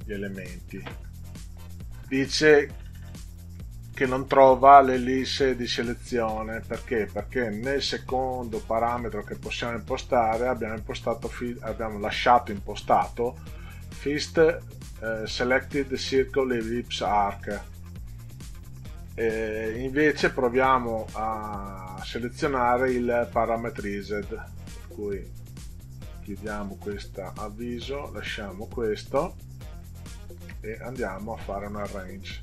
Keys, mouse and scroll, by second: 24.6 click, 26.3 click, 27.7 click, 31.2 click.